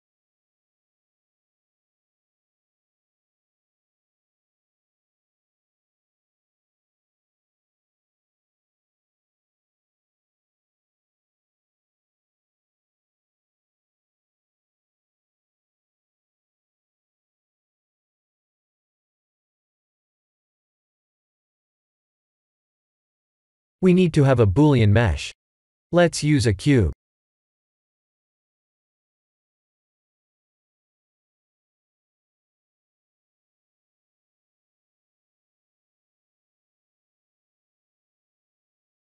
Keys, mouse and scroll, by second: 0.6 s, 3.7 right click, 4.8 right click, 5.3 middle click, 6.5 click, 6.9 scroll up 1, 7.5 middle click, 9.9 KP_1, 10.9 shift+middle click, 11.4-12.1 scroll up 5, 12.1 Tab, 13.2 shift+z, 14.1 click, 14.8 s, 16.0 ctrl+z, 16.3 middle click, 17.4 3, 17.6 click, 18.1 s, 20.0 KP_1, 20.8-21.2 scroll down 6, 22.7 Tab, 23.3 shift+z, 26.4 shift+a, 30.6 g, 32.5 shift+z, 33.1 g, 34.5 r, 36.6-37.5 scroll up 6, 38.0 g.